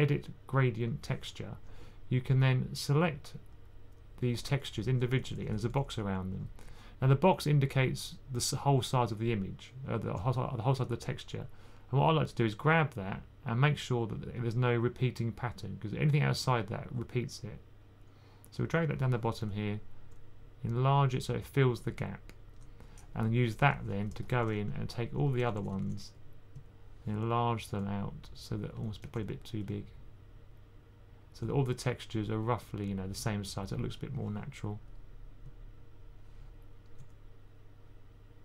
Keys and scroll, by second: 4.6-5.6 typing, 23.3-25.5 typing, 29.0 typing.